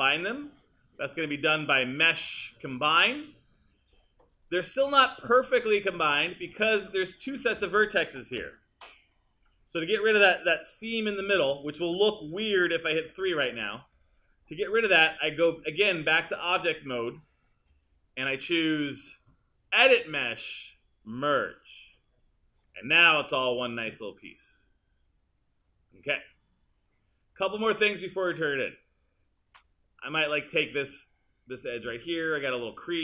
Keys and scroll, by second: 8.4 w, 11.4 super+z, 13.1 3.